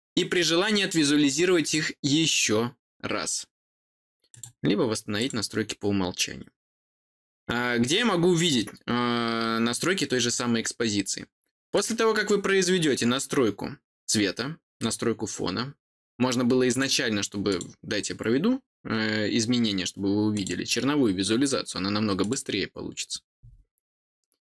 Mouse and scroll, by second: 1.6 click, 4.3 click, 5.1 click, 11.7 click, 16.7 click, 17.4 click, 20.3 click, 22.2 click.